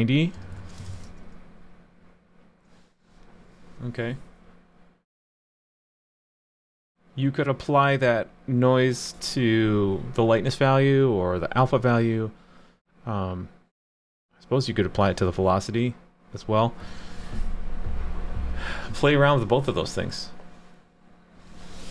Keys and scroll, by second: 0.9 super+s.